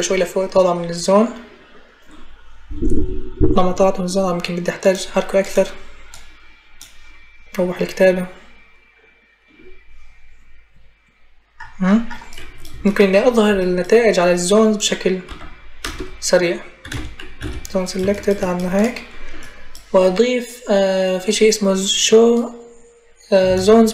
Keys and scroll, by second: 15.0 u, 15.6 BackSpace, 16.6 z, 16.7 space.